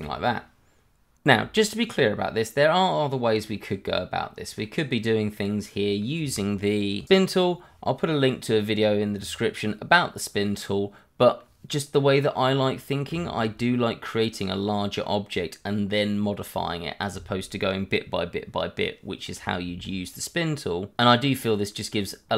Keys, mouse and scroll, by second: 0.1 alt+x, 0.2 click, 0.4 scroll down 1, 0.4 click, 0.5 middle click, 0.9 scroll up 1, 1.3 middle click, 3.2 scroll up 1, 3.4 middle click, 9.6 middle click, 13.2 shift+middle click, 13.3 middle click, 19.8-20.5 scroll up 1, 20.5 middle click.